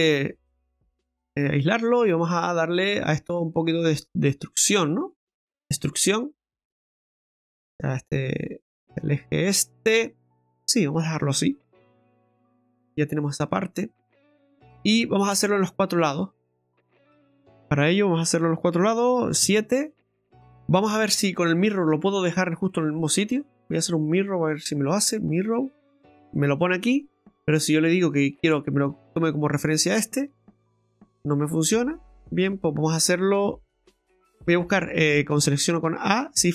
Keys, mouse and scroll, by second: 1.5-2.0 scroll up 4, 2.0 scroll down 2, 2.3 middle click, 5.5 ctrl+z, 5.6 e, 9.7 middle click, 10.3 scroll down 1, 10.5 middle click, 11.9 KP_Divide, 12.8-13.2 scroll down 2, 13.4 right click, 13.8 middle click, 14.4-14.7 scroll up 4, 15.2 shift+middle click, 15.6 middle click, 16.5 scroll up 2, 17.5 right click, 19.3 KP_7, 21.9 click, 22.6 click, 28.1 click, 31.4 click, 32.4 right click, 34.1 Tab, 34.1 middle click, 34.1 shift+s, 35.4 a, 36.4 shift+s.